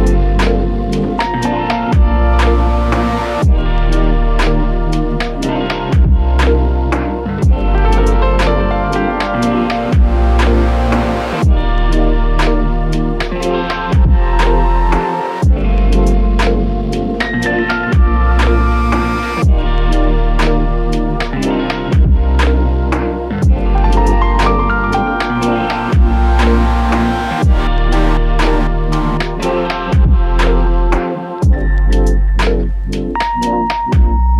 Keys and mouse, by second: 2.6-3.0 typing, 4.6 typing, 9.0 double click, 12.9 double click, 14.6 ctrl+z, 15.1 ctrl+z, 15.9 ctrl+z, 19.8 double click, 23.4 typing, 25.4 typing, 33.5 double click.